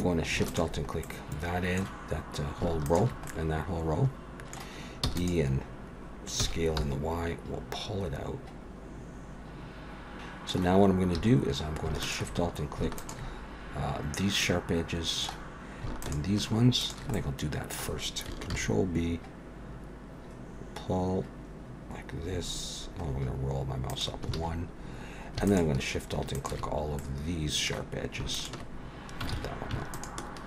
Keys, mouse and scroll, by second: 0.5 alt+shift+click, 1.0 middle click, 2.8 alt+shift+click, 3.3 middle click, 5.0 e, 6.4 s, 9.7 alt+a, 9.7 click, 9.7-10.4 scroll up 1, 10.4 middle click, 11.2 2, 12.0 alt+shift+click, 13.0 alt+shift+click, 14.4 middle click, 16.0 alt+shift+click, 16.8 alt+shift+click, 17.1 middle click, 18.5 ctrl+b, 24.3 alt+a, 25.5 alt+shift+click, 26.3 alt+shift+click, 27.0 middle click, 28.3 alt+shift+click, 29.3 ctrl+z, 29.9 alt+shift+click.